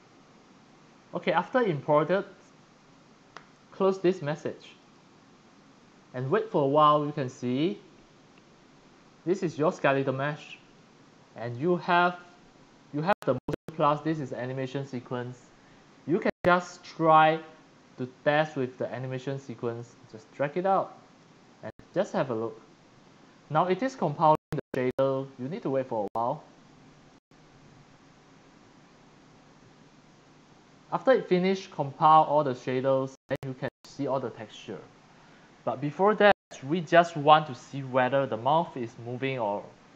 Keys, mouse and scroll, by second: 1.3 click, 4.8 click, 9.6 click, 15.6 click, 16.3 click, 19.7-21.2 drag, 22.1-24.9 drag, 25.1 click, 27.2-28.3 drag, 30.1-31.4 drag, 31.8 click.